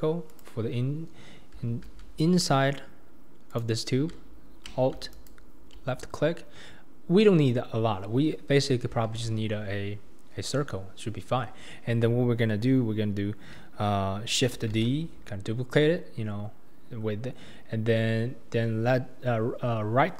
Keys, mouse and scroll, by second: 0.3 click, 1.7 alt+z, 2.1 scroll up 1, 3.5 click, 5.1 alt+click, 6.4-7.2 scroll down 1, 7.2 KP_1, 7.8-8.9 scroll down 2, 9.0 alt+z, 14.7 shift+d.